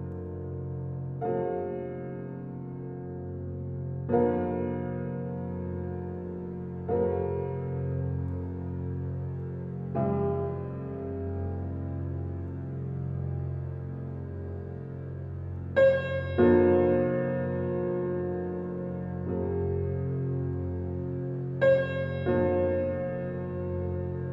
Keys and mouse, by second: 0.8 click, 1.9 click, 2.3 click, 3.4 typing, 5.3 click, 6.8 ctrl+alt+click, 8.1 ctrl+alt+click, 8.6 alt+shift+click, 9.2 click, 12.0 1, 12.8 alt+shift+click, 13.2 ctrl+alt+click, 17.0 click, 19.3 1, 19.8-21.4 ctrl+alt+drag, 21.9 ctrl+alt+click, 22.8 ctrl+alt+click, 23.1-24.3 ctrl+alt+drag.